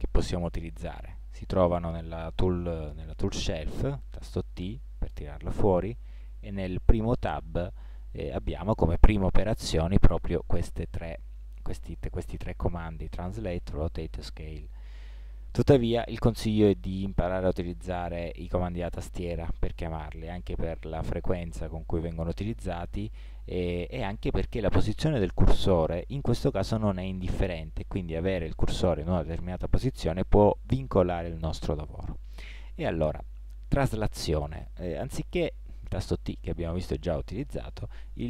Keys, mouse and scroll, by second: 3.0 t, 3.5 t.